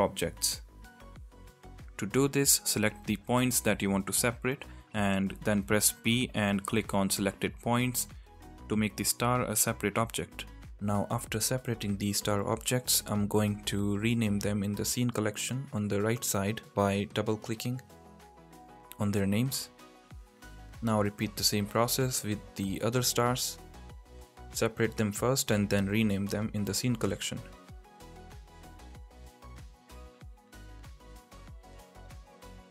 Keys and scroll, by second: 1.2 Tab, 2.3 l, 6.0 p, 9.5 Tab, 18.0 Tab, 20.3 l, 21.4 p, 22.7 Tab, 31.3 Tab, 31.8 l.